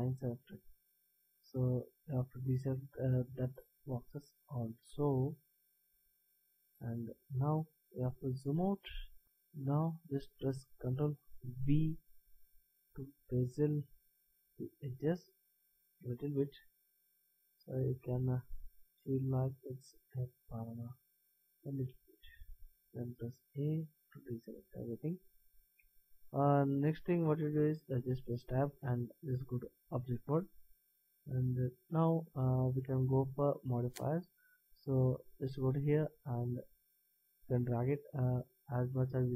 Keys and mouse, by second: 4.5 middle click, 6.7 middle click, 7.5 middle click, 8.0-11.7 middle drag, 11.7 ctrl+b, 23.5 a, 27.9 Tab, 30.9 middle drag, 31.1-33.5 middle drag, 36.5 click.